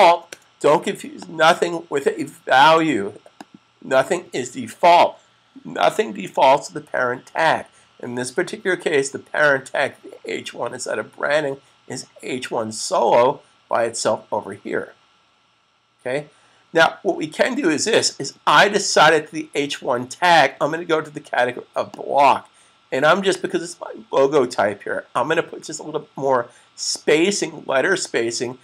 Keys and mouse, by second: 1.0 click, 22.0 click.